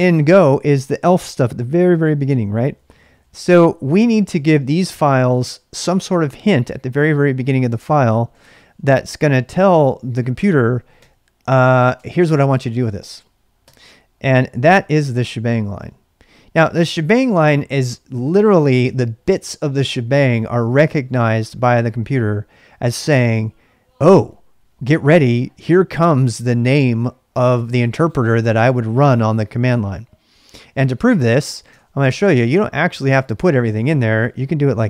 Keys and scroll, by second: 2.4-3.7 typing, 7.5-8.8 typing, 9.4 Return, 10.7-14.6 typing, 11.9 Return, 30.7-34.0 typing.